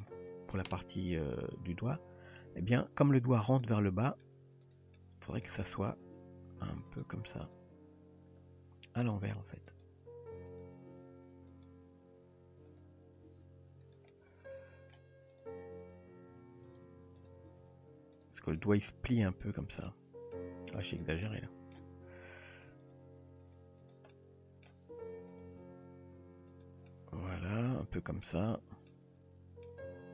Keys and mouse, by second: 3.6-4.2 middle drag, 5.0-5.5 middle drag, 6.1 g, 9.0 click, 9.8 click, 10.6 click, 10.9 g, 12.7 click, 13.3 g, 14.1-15.0 middle drag, 15.3 click, 15.8 g, 17.2 click, 17.5 g, 18.6-19.4 middle drag, 19.9-20.4 middle drag, 21.0 click, 21.2-21.8 middle drag, 22.8 shift+click, 23.5 shift+drag, 23.9 shift+click, 24.1-24.7 middle drag, 25.0 g, 25.6 r, 26.9-28.3 middle drag, 28.4 Tab, 28.9-29.7 middle drag, 29.9 Tab.